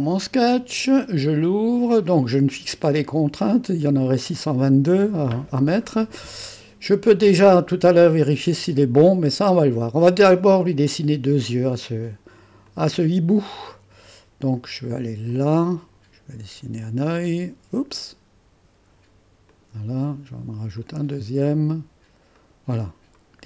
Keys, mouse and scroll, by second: 7.1 scroll down 2, 12.6 click, 15.3-17.4 drag, 19.5 click, 20.7-21.8 drag, 22.3 click, 22.7 click, 23.3 middle click.